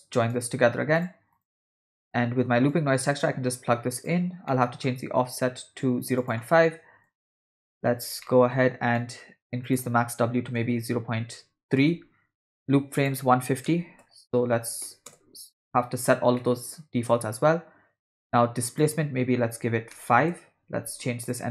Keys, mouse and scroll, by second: 2.7-4.2 drag, 4.5 middle click, 6.2-7.4 drag, 8.2 ctrl+middle click, 9.0 middle click, 9.7-11.8 drag, 13.0-15.2 drag, 16.4 middle click, 18.7-20.2 drag, 21.3-21.5 drag.